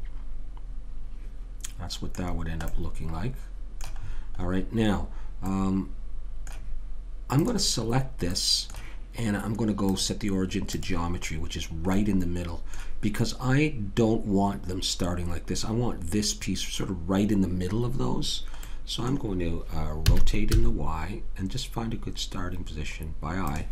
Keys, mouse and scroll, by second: 0.6 middle click, 2.7 middle click, 4.4-5.5 middle drag, 7.4 click, 8.3-10.8 middle drag, 11.5 right click, 12.3-14.3 middle drag, 18.7-20.0 middle drag, 20.0 r, 20.1-23.0 middle drag.